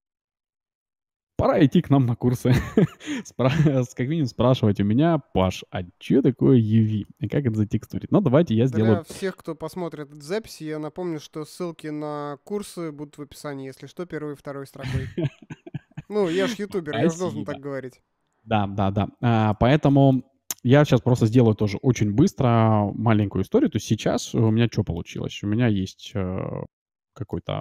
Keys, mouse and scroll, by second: 5.0-5.4 scroll up 1, 5.4-7.1 middle drag, 7.9 Tab, 8.3-10.0 middle drag, 18.7 middle click, 19.0-19.5 scroll up 1, 19.5-21.9 middle drag, 22.8 Tab, 23.2 middle click, 23.5 Tab, 24.4 shift+z, 25.0 middle click, 26.3-27.6 middle drag.